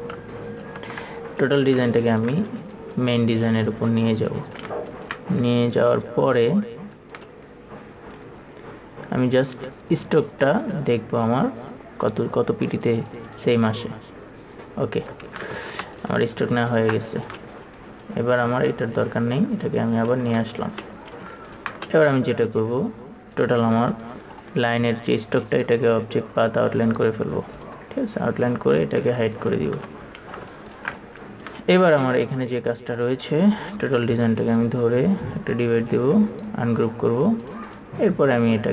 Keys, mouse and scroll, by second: 1.0 KP_3, 2.2 ctrl+super+space, 3.1-4.9 drag, 5.3 ctrl+click, 6.1-9.9 drag, 10.5-15.7 drag, 15.8 ctrl+super+space, 20.7 shift+space, 20.9 click, 21.9 ctrl+click, 25.9 click, 28.0 click, 30.2 KP_3, 30.7 space, 31.6-35.7 drag, 36.7 right click.